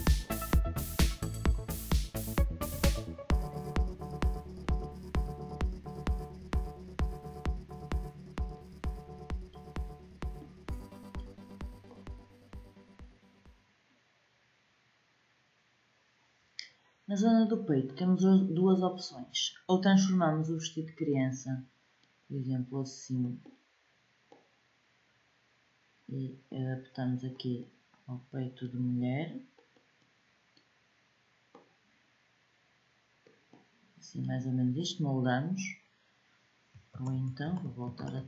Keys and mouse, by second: 7.7 g, 36.7 ctrl+z, 37.2 ctrl+z, 37.7 ctrl+z.